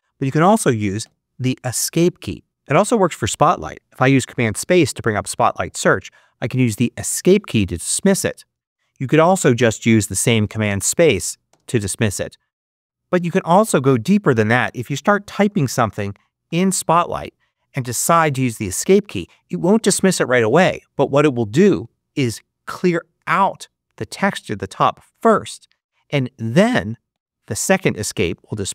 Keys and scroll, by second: 0.9 Escape, 2.4 super+h, 6.9 Escape, 9.2 super+space, 15.1-16.8 typing, 23.2 Escape, 27.0 Escape.